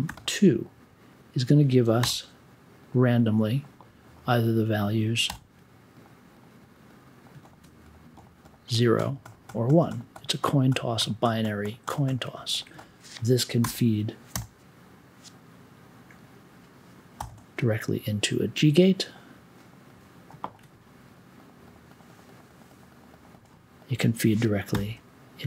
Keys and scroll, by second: 0.0 2, 2.0 m, 5.2 b, 13.6 BackSpace, 14.3 n, 17.1 g, 24.7 t.